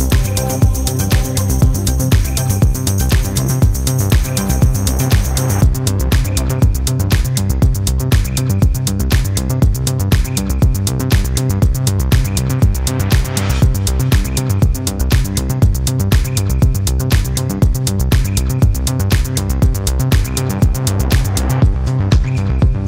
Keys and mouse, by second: 2.7-4.5 middle drag, 5.2-6.6 middle drag, 7.8-9.1 middle drag, 10.5-11.1 shift+middle drag, 12.4-13.8 middle drag, 18.8 click, 20.3-21.4 middle drag, 22.1-22.8 middle drag.